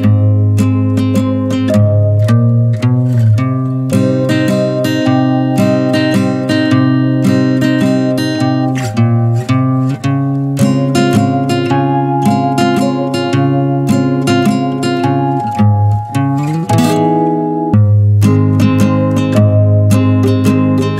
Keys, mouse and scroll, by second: 0.2 scroll up 1, 0.4-1.0 middle drag, 1.0 Tab, 1.2-2.1 middle drag, 2.1 Tab, 2.2-4.0 middle drag, 4.0 click, 4.4 middle drag, 4.6 scroll up 3, 4.8 Tab, 5.0-5.8 middle drag, 5.8 Tab, 7.4 click, 7.7 click, 8.3 scroll down 1, 8.4-9.8 middle drag, 9.8 click, 10.1 click, 10.6 scroll down 1, 10.8-11.9 middle drag, 11.9 click, 12.1 click, 12.7-13.2 middle drag, 13.2 scroll up 1, 13.4-13.8 middle drag, 13.8 click, 15.1-17.2 drag, 17.7-18.6 drag, 18.9-19.5 drag, 19.9 click, 20.4 middle click, 20.7 click, 20.9 Tab.